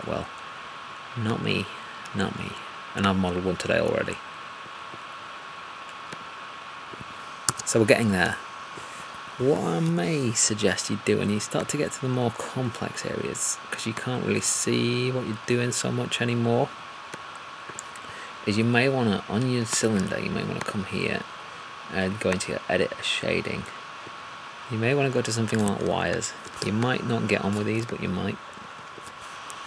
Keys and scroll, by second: 25.7 alt+`, 26.4 alt+`.